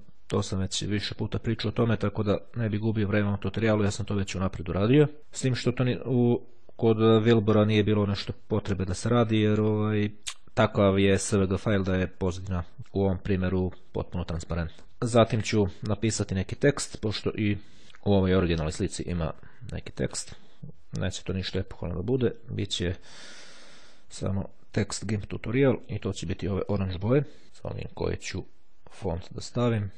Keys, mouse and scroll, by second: 6.2 click, 14.8 click, 17.8 click, 19.9 click, 22.0 click, 25.4 click, 26.8 click, 27.6 click, 29.5-29.9 scroll down 1.